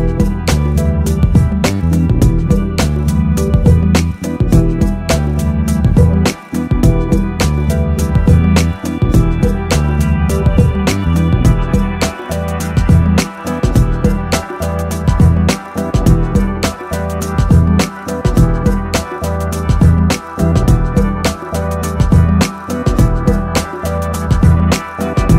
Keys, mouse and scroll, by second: 1.6 KP_0, 4.2 middle click, 4.6 click, 6.1 middle click, 7.9 middle click, 9.2 KP_0, 11.6 click, 12.0 middle click, 15.0 click, 15.8 click, 16.1 middle click, 16.8 KP_0, 19.5-20.7 drag, 23.3 click, 23.9 click.